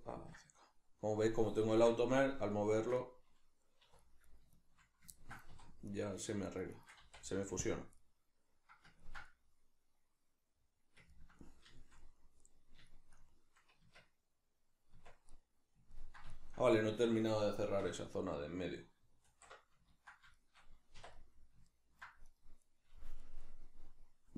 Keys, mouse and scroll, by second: 3.8 2, 4.3 right click, 4.5 shift+right click, 5.1-5.9 ctrl+middle drag, 5.5 3, 5.9 right click, 6.2 shift+right click, 6.5 shift+right click, 6.7 shift+right click, 7.0 x, 8.0-19.9 middle drag, 13.8 Tab, 17.8 \, 19.3 alt+q, 20.3-22.3 shift+middle drag, 21.0 1, 22.3 right click, 23.2-24.3 middle drag.